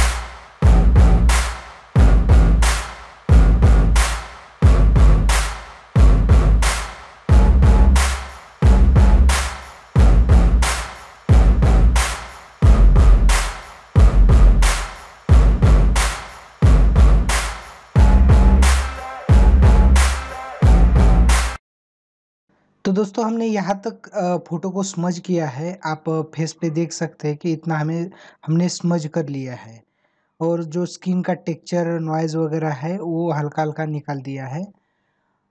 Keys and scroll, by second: 0.1 space, 0.2 ctrl+alt+z, 2.8 ctrl+alt+z, 3.7 space, 6.2 ctrl+alt+z, 7.1 ctrl+alt+z, 12.0 ctrl+alt+z, 12.4 ctrl+alt+z, 12.6 space, 13.8 space, 14.9 ctrl+=, 15.1 space, 15.6 ctrl+=, 16.0 space.